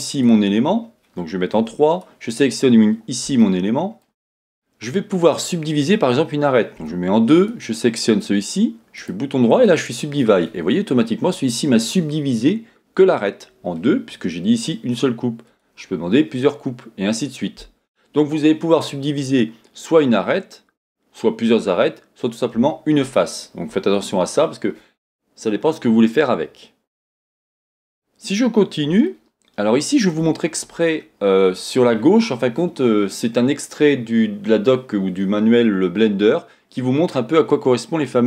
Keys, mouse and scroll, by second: 0.1 click, 0.2-1.5 middle drag, 1.9 click, 3.6 shift+middle click, 6.8 2, 7.3 click, 9.0-15.5 right drag, 15.5-29.1 drag, 27.3 Tab, 27.8 scroll down 2, 29.1-38.2 shift+middle drag.